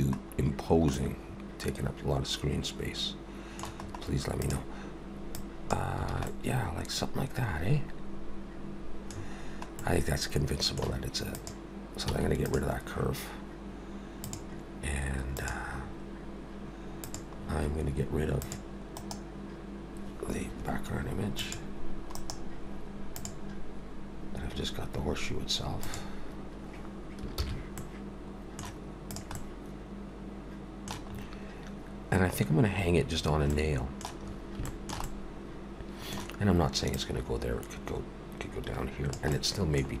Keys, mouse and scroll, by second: 0.4-0.9 scroll down 2, 0.9 middle click, 3.8-4.1 scroll up 2, 4.4 click, 5.4 click, 6.1 alt+a, 6.3 middle click, 9.2 scroll down 3, 9.8 middle click, 11.3 click, 12.1 x, 14.2 click, 15.5 click, 15.8-16.3 scroll down 2, 17.1 click, 17.4 scroll down 3, 18.4 click, 19.0 right click, 21.4 click, 22.1 right click, 25.8 click, 27.4 ctrl+s, 27.8 middle click, 29.1 click, 29.4 middle click, 31.1 scroll up 4, 33.2 scroll down 2, 33.5 middle click, 34.2 scroll up 2, 34.7 shift+middle click, 35.0 middle click, 36.9 click, 39.3 middle click, 39.9-40.0 scroll down 4.